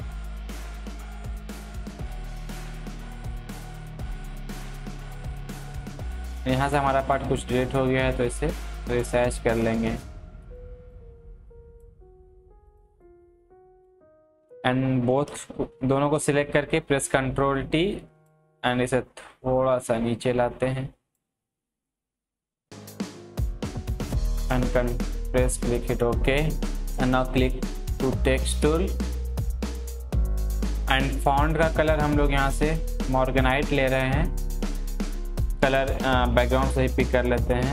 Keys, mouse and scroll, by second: 6.4 alt+right click, 7.0-12.7 drag, 14.9 click, 16.1 ctrl+t, 17.5-21.9 alt+drag, 21.9-26.8 drag, 28.1 click, 28.2-30.7 drag, 33.8 click, 33.8 click, 36.9 click, 36.9 click.